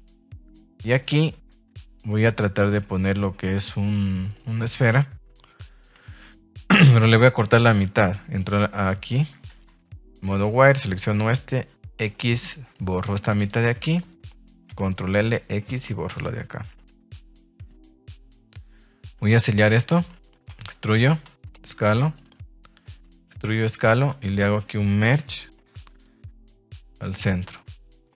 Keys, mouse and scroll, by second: 0.3 click, 1.1 shift+a, 9.4 Tab, 10.6 alt+right click, 11.9 x, 13.4 right click, 14.6 ctrl+l, 15.1 x, 15.9 Tab, 17.6 z, 18.4-19.0 middle drag, 19.1 Tab, 19.7 alt+right click, 20.5 e, 20.9 Escape, 22.0 click, 22.6 Escape, 23.0 s, 23.7 click, 23.9 space, 27.1 Tab, 27.5 middle click.